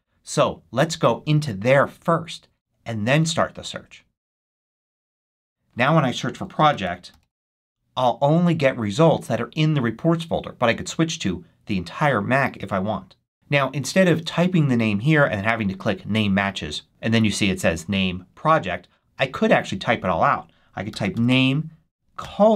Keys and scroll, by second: 6.2-7.9 typing, 20.6-22.5 typing.